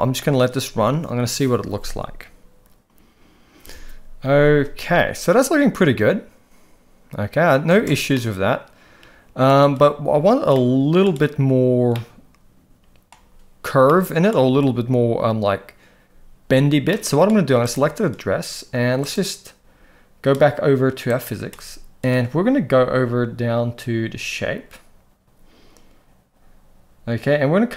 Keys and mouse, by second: 7.7 space, 8.1-9.4 middle drag, 10.5-11.0 middle drag, 11.9-13.1 middle drag, 13.9-14.3 middle drag, 16.9-17.3 middle drag, 17.6 click, 19.0 drag.